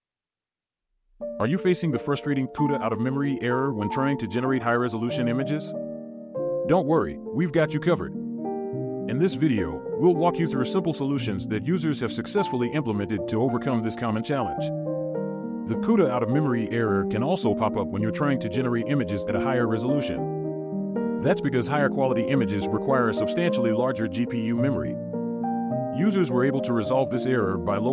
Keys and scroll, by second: 6.4-8.6 scroll up 1, 8.5-9.2 typing, 10.6 typing, 12.4 scroll down 1, 13.7 typing, 14.8-15.8 typing, 18.5-20.7 typing, 19.7 scroll up 1.